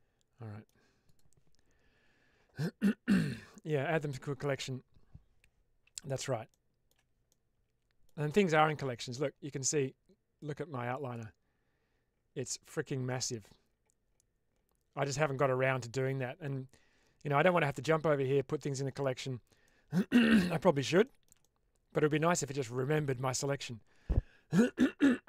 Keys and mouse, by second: 1.0 click, 6.4-6.7 shift+middle drag, 7.2-7.9 middle drag, 10.3 click, 19.5-20.6 middle drag, 20.9 shift+middle drag, 21.3-21.9 middle drag.